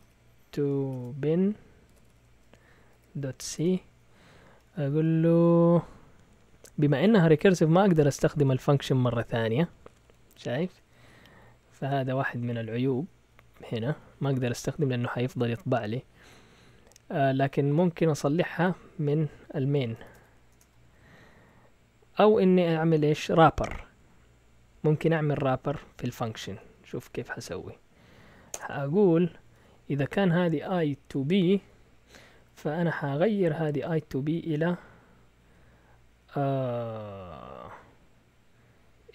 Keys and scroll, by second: 0.0-3.3 typing, 3.6 Return, 4.3 Down, 4.7 Down, 4.8 Down, 4.9 Down, 6.9 Up, 7.1 Up, 7.2 Up, 7.4-10.0 typing, 8.6 Up, 11.4 typing, 12.2 Up, 12.8 Up, 13.2 Down, 13.7 Down, 19.7 Escape, 19.8-20.6 typing, 21.2 Up, 21.3 Up, 26.1 Down, 26.1 Down, 26.6 Up, 28.5-30.0 typing, 31.6-32.8 typing, 34.1-35.4 typing.